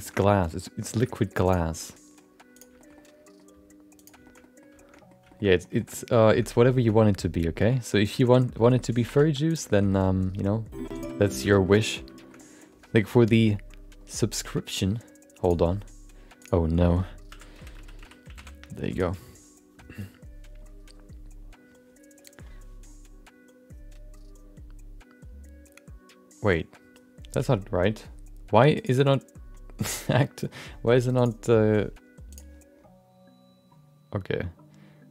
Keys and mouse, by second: 0.0 shift+middle click, 0.2 middle click, 1.0 g, 1.9 middle click, 2.5 click, 2.7 middle click, 2.9 middle click, 3.5 g, 4.2 shift+middle click, 4.4 middle click, 4.9 middle click, 5.3 shift+middle click, 5.4 middle click, 5.7 shift+middle click, 5.9 middle click, 6.3 shift+middle click, 6.7 shift+middle click, 6.9-7.9 middle drag, 8.0 shift+middle click, 8.2 middle click, 9.0 1, 9.5 click, 9.7 shift+middle click, 9.9 middle click, 10.9 click, 11.5 shift+middle click, 11.7 middle click, 12.2 shift+middle click, 12.4 middle click.